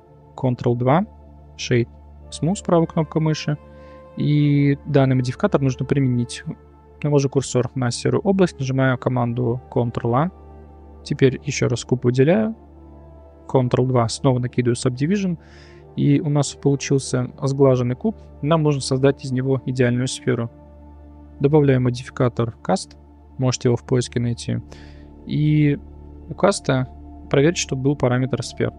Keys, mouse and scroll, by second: 0.5 ctrl+2, 1.4 right click, 3.3 middle drag, 7.3 click, 9.1 click, 10.0 ctrl+a, 11.0 click, 13.7 ctrl+2, 15.9-16.7 middle drag, 17.4-18.6 middle drag, 19.5-19.9 middle drag, 21.4-24.4 drag, 25.7 click.